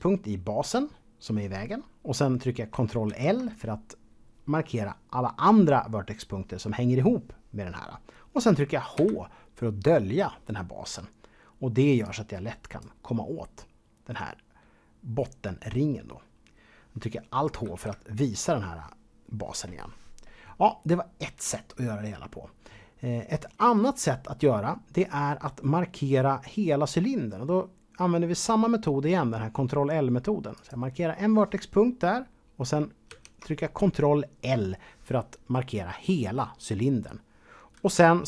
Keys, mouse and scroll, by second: 3.0 ctrl+l, 8.9 h, 12.0 click, 17.6 alt+h, 30.5 click, 33.1 ctrl+l.